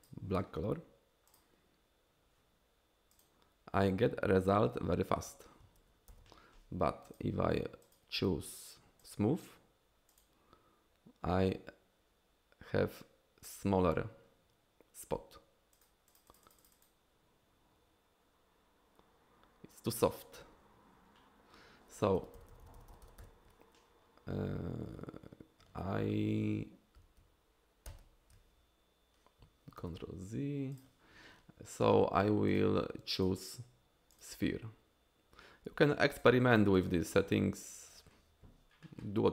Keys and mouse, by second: 1.3 click, 3.3 click, 6.1 ctrl+z, 7.2-9.4 drag, 10.1 click, 15.8 click, 16.1 click, 16.3 click, 16.5 click, 16.6 click, 22.2 ctrl+z, 22.4 ctrl+z, 22.5 ctrl+z, 22.6 ctrl+z, 22.9 ctrl+z, 23.0 ctrl+z, 24.7 ctrl+z, 28.3 ctrl+shift+z, 29.4 ctrl+shift+z, 30.8 click, 32.6-34.5 drag, 36.3-38.1 drag.